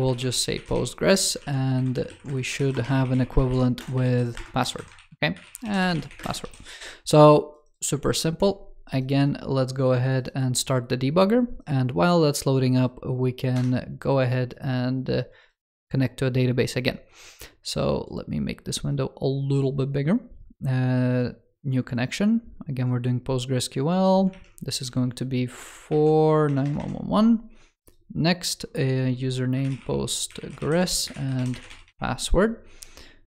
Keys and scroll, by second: 1.3 super+d, 1.8 alt+Left, 2.5 ctrl+s, 4.8 ctrl+s, 6.3 super+s, 24.2 super+a.